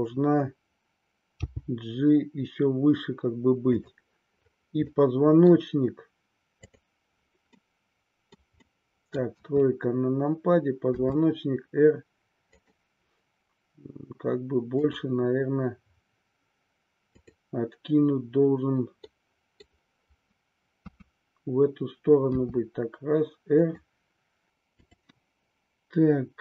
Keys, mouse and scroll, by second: 1.4 g, 3.9 click, 4.9-5.5 middle drag, 6.5-8.0 drag, 8.0 middle click, 8.7 middle click, 9.3 KP_3, 10.9 r, 12.5 click, 14.7-16.1 drag, 17.1-19.3 drag, 19.3-19.7 middle drag, 20.8 KP_3, 22.3 r, 23.7 click, 24.8-25.9 drag.